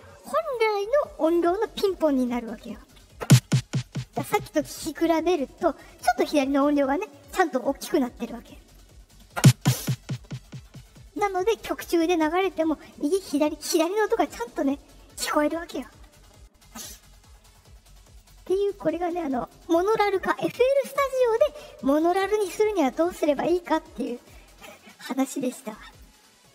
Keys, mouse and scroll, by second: 18.1 click, 19.3 click, 24.4 click, 25.8 click.